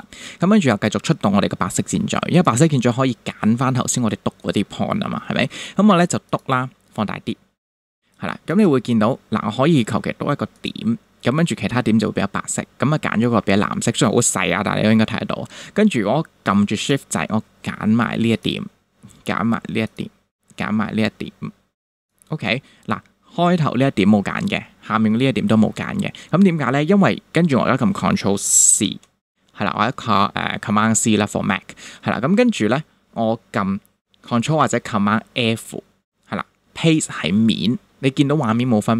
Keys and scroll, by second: 6.8 super+=, 8.0 super+space, 8.6 space, 28.8 super+c, 35.4 super+f.